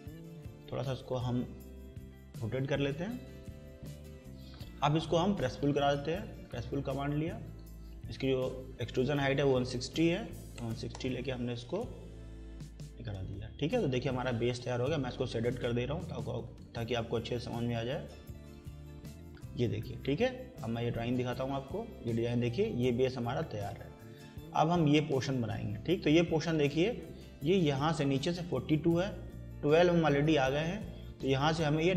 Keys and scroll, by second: 9.8-11.1 typing, 12.3 Escape.